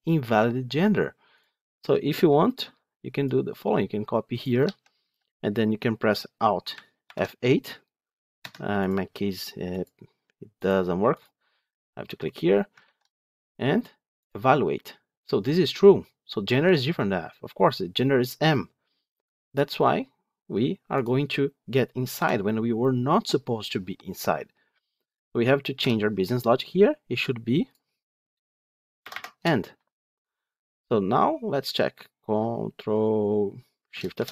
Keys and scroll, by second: 4.5 ctrl+c, 11.2 alt+F8, 12.7 ctrl+v, 22.1 F8, 29.7 F9, 34.1 ctrl+shift+F10.